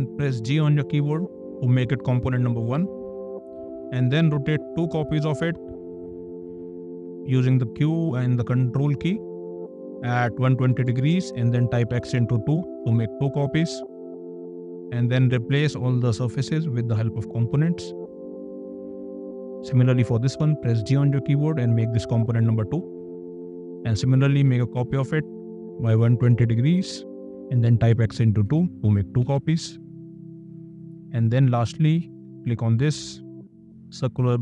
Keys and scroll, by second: 0.6 g, 4.3 q, 10.6 2, 10.9 KP_0, 11.1 Return, 11.9 *, 12.2 2, 12.8 Return, 13.9 space, 20.4 g, 23.7 q, 26.0 KP_1, 26.2 KP_2, 26.5 KP_0, 26.7 Return, 27.6 KP_Multiply, 27.9 KP_2, 28.4 Return, 29.2 space.